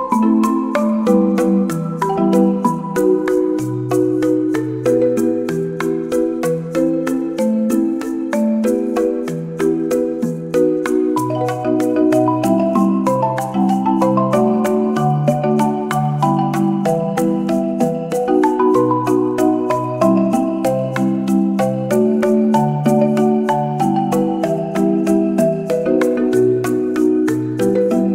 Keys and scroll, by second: 0.7 space, 4.0 space, 7.2 space, 12.1 space, 19.6 space, 22.6 space, 24.2 space.